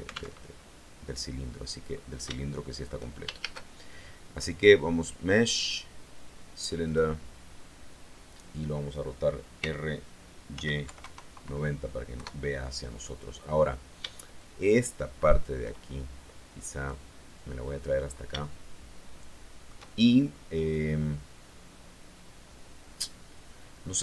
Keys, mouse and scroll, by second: 0.2 alt+Tab, 1.8-2.2 scroll down 2, 2.2 shift+middle click, 3.3 shift+a, 6.8 click, 9.5 r, 10.4 y, 10.8 KP_9, 10.9 KP_0, 12.0 KP_Enter, 14.3-15.5 shift+drag, 16.8-17.9 drag, 18.0 scroll up 3, 18.3-19.8 shift+middle drag, 20.0 shift+scroll up 2, 23.9-24.0 middle drag.